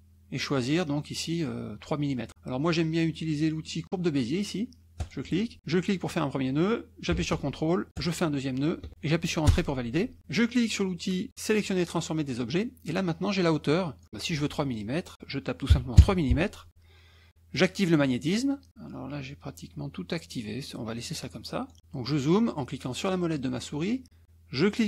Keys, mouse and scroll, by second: 5.0 click, 5.6 click, 8.0 ctrl+click, 9.5 Return, 11.6 click, 14.0 click, 16.0 KP_Enter, 17.5 click, 18.3 click, 20.9 click, 21.7 middle click, 23.1 middle click.